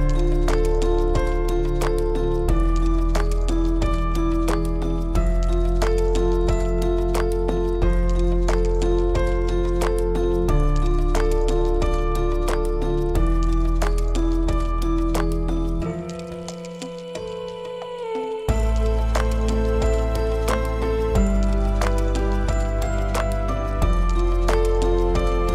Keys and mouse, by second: 1.5 shift+d, 10.1 shift+d, 15.6-16.0 middle drag, 16.4-16.8 shift+middle drag, 16.8 middle click, 17.3 click, 17.6-18.4 middle drag, 18.6-19.5 middle drag, 19.7 click, 22.2 drag, 22.7-23.1 drag, 23.7-24.0 shift+drag.